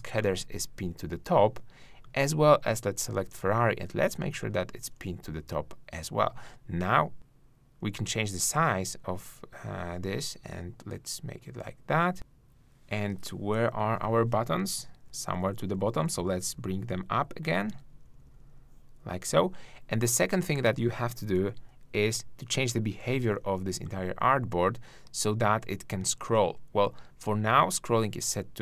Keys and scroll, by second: 15.0 shift+Up.